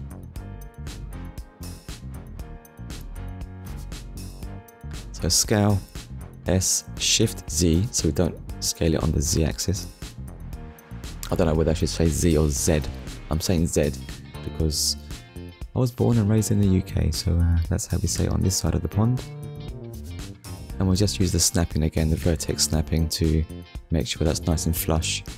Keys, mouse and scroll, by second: 0.1 scroll up 1, 0.9 shift+middle click, 4.8 shift+z, 8.1 click, 10.6 click, 11.4 click, 12.4 middle click, 14.2 KP_1, 15.0 scroll up 1, 15.8 shift+middle click, 16.4-16.8 scroll up 1, 17.5 click, 18.5 click, 21.7 shift+middle click, 22.5 shift+middle click, 23.4 click, 24.5 click.